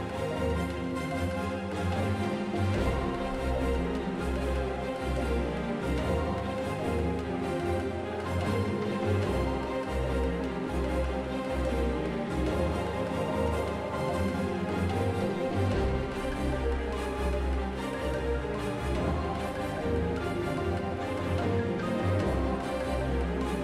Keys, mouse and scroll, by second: 1.2 F6, 6.6 Tab, 9.0 KP_7, 9.8 x, 10.7 shift+a, 12.7 shift+d, 16.2 Tab, 18.1 i, 20.8 F6.